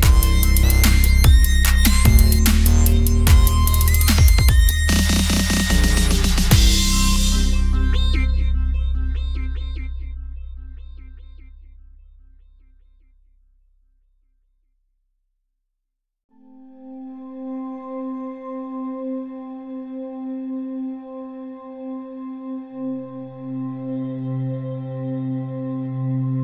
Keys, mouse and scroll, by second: 0.3-1.4 scroll up 1, 1.4-2.6 middle drag, 2.6 click, 3.5 alt+m, 4.1 click, 4.9 alt+m, 5.4 middle click, 6.0 ctrl+z, 6.2 ctrl+z, 6.5 ctrl+z, 6.6 ctrl+z, 6.7 ctrl+z, 7.3 shift+click, 7.9 alt+shift+m, 8.5 s, 9.3 shift+click, 9.8 shift+s, 10.7 shift+click, 11.2 alt+shift+m, 11.8 click, 12.3 alt+m, 12.9 middle click, 14.1 click, 14.3 s, 15.8-16.9 drag, 16.5 s, 17.5 middle click, 19.0 middle click, 20.0 Tab, 20.5 middle click, 21.6 Tab, 22.1 x, 23.0-24.0 drag, 23.7 x, 24.1 Tab, 24.5 middle click, 24.9 Tab, 25.3 a, 25.4 e.